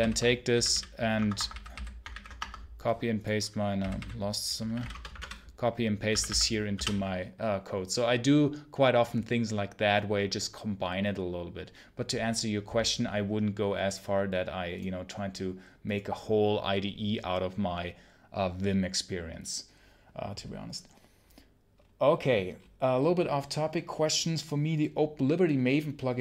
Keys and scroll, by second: 4.8 Return.